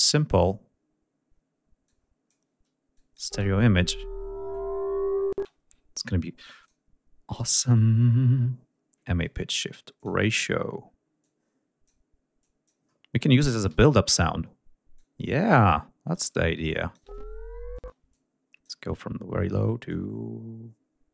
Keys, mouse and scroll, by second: 1.5 click, 2.6-3.0 drag, 2.9 space, 5.0 space, 6.2 click, 9.6 click, 10.8-11.7 drag, 12.0 click, 12.5 scroll down 1, 13.3 d, 13.7 click, 14.6 click, 16.7 space, 17.4 space, 19.5-21.1 drag.